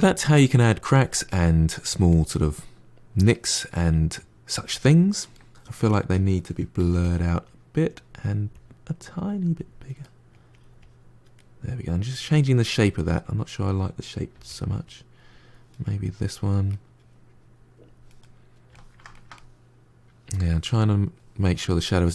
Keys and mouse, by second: 5.2 ctrl+middle click, 6.0 click, 6.6 f, 7.3-9.9 drag, 9.9 middle click, 10.4 click, 11.2 middle click, 12.0 click, 12.6-14.2 middle drag, 14.2 f, 14.7 click, 15.7-17.1 middle drag, 17.1-18.1 drag, 18.1-22.1 middle drag.